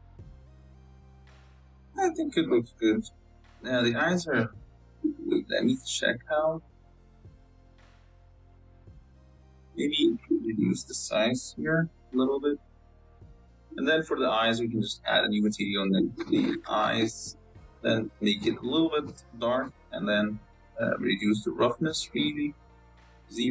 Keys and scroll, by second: 0.0 KP_0, 0.6 z, 3.9 z, 6.9 g, 7.3 g, 8.4 KP_0, 8.9 g, 9.7 Tab, 10.1-13.0 typing, 11.4 Tab, 12.3 Tab, 13.1 Tab, 17.1 BackSpace.